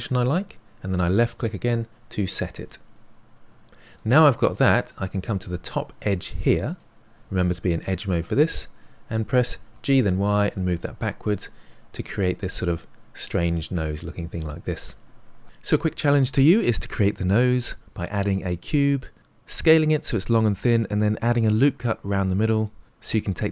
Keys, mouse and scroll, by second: 2.9-4.2 middle drag, 4.2-4.7 scroll up 2, 4.7-6.7 middle drag, 6.7 click, 9.7 g, 11.6-12.0 scroll down 1, 12.0-15.1 middle drag.